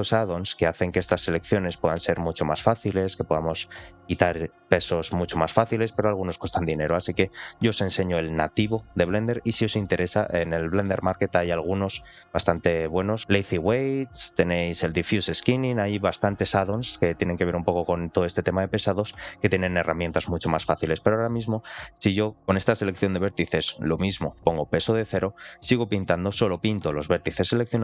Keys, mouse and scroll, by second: 0.0 ctrl+shift+click, 0.5 ctrl+shift+click, 1.1 ctrl+shift+click, 21.1 middle click, 24.3 click, 25.3-27.3 drag, 27.6 middle click.